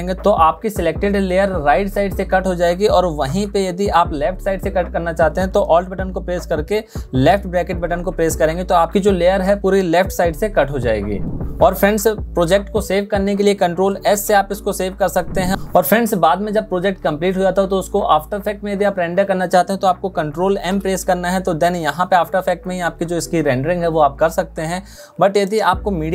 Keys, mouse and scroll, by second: 5.8 alt+{, 13.5 ctrl+s, 20.1 ctrl+m.